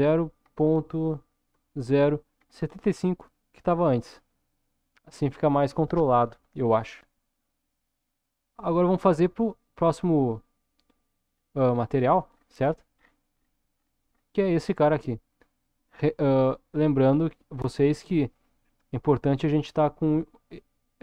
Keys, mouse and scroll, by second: 6.9-8.8 middle drag, 9.9-11.1 scroll up 1, 12.3-15.9 scroll up 8.